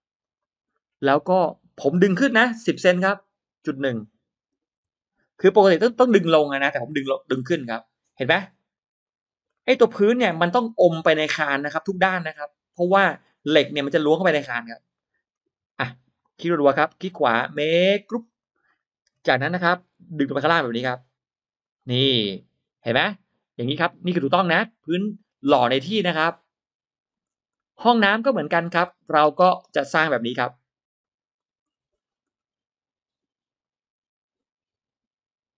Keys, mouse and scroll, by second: 0.1 click, 0.6-0.9 scroll up 1, 0.6 middle click, 1.2-1.6 scroll down 1, 2.4 p, 3.0 click, 4.8 1, 5.4 Return, 7.4 middle click, 8.4 click, 9.1 click, 9.4 middle click, 9.9 scroll up 1, 10.2 middle click, 10.8 scroll down 1, 11.2 scroll up 1, 11.2-13.0 middle drag, 13.2 scroll down 1, 13.4 middle click, 13.6-14.0 scroll up 1, 14.8 middle click, 15.4 middle click, 16.0 click, 16.2 click, 16.5 click, 18.0 click, 18.6 middle click, 19.4 scroll up 1, 19.8 m, 20.2 click, 21.5 click, 21.8-22.1 scroll down 1, 22.1 middle click, 22.5 scroll down 1, 22.7-26.9 middle drag, 26.9-27.2 scroll down 1, 27.4 scroll up 1, 27.4 middle click, 27.6 scroll down 1, 28.0-28.3 scroll up 1, 28.1 space, 28.9 middle click, 29.4 drag, 30.0 scroll up 1, 30.3 click, 30.6 r, 31.2 click, 31.4 r, 31.5-31.8 scroll down 1, 32.0-32.6 scroll up 1.